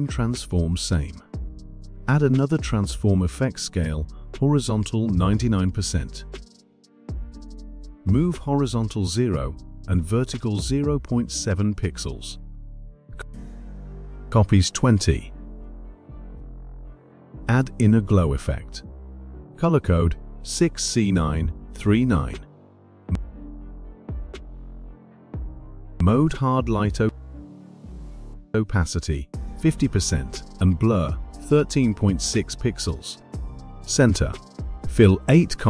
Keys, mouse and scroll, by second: 1.9 click, 4.8 click, 7.5-8.6 typing, 8.8-11.6 drag, 11.6 typing, 12.7-14.2 typing, 14.8 click, 15.6 2, 16.4 click, 17.6 click, 19.3 click, 22.2-24.2 typing, 25.8 click, 26.0 click, 27.4 click, 29.1 click, 29.9 typing, 30.6 click, 31.6-33.4 typing, 34.0 click.